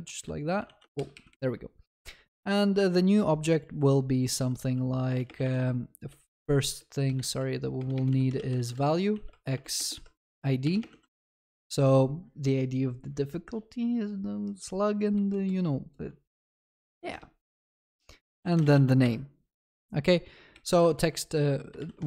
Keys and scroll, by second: 18.8 ctrl+s.